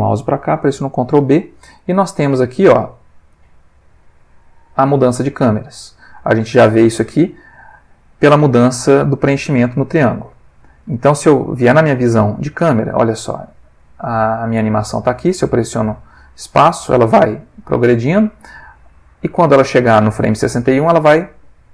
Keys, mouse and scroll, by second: 1.1 ctrl+b, 3.3-5.7 drag, 5.9-7.3 middle drag, 9.3-11.2 drag, 11.9 click, 13.4-15.2 drag, 15.3 space, 17.2 Escape, 17.7-21.7 drag.